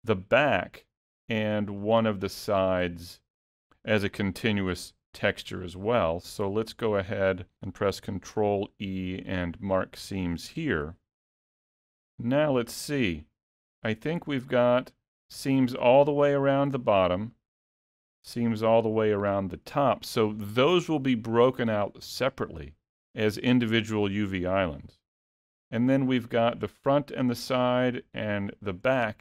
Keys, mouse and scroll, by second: 0.6 click, 1.9 shift+click, 4.6 shift+click, 5.4 middle click, 8.4 ctrl+e, 10.9 alt+a, 11.3-13.6 scroll down 2, 11.7 middle click, 14.0-14.4 scroll up 1, 14.5 middle click, 16.9 middle click, 25.1 middle click, 27.6 middle click, 29.0 middle click.